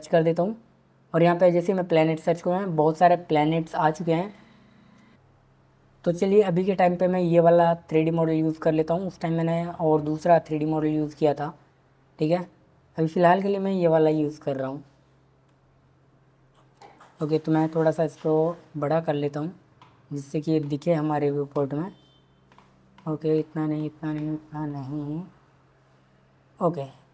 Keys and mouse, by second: 15.4 drag, 17.7 s.